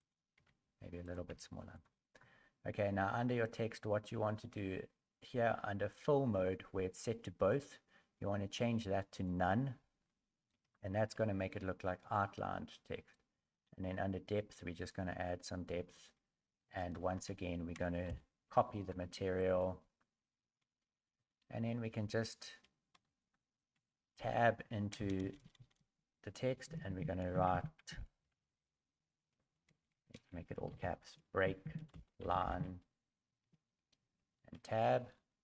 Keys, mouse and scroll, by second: 10.0 click, 10.0 scroll up 5, 10.7 shift+middle click, 11.2 scroll up 2, 16.8 click, 16.8 shift+right click, 18.1 ctrl+l, 23.2 Tab, 23.2 right click, 23.7 Tab, 25.0-25.7 typing, 28.2 b, 28.6 r, 35.0 Tab, 35.0 scroll down 5, 35.0 i, 35.0 n, 35.0 e.